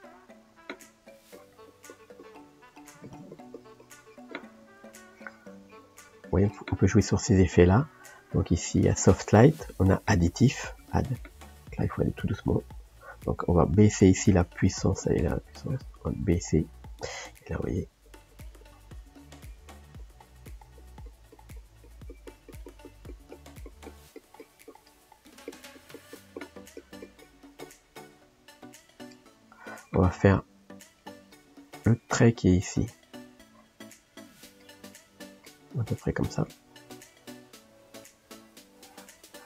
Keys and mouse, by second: 1.3-2.4 drag, 2.4 middle click, 3.0-9.1 drag, 9.8 click, 10.7-12.2 drag, 12.2 f, 15.7-18.1 drag, 18.3 click, 19.1 f, 19.7 click, 20.8-22.2 drag, 22.3 click, 23.3-24.9 drag, 24.9 middle click, 25.5 click, 25.8-27.0 drag, 27.0 click, 28.0-38.6 middle drag, 38.6-39.4 drag.